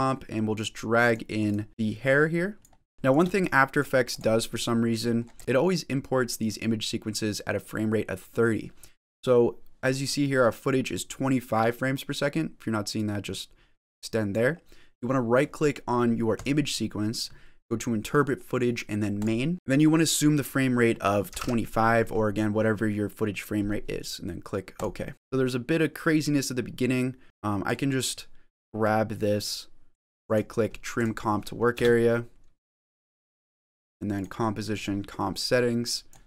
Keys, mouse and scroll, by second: 2.5 click.